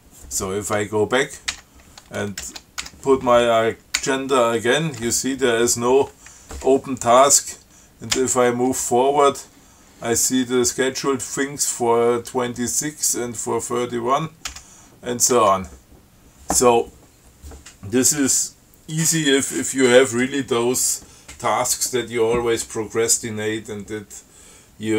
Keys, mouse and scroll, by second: 1.8 q, 2.7 ctrl+c, 3.1 ctrl+a, 4.2 a, 8.4 f, 14.7 f, 15.6 q.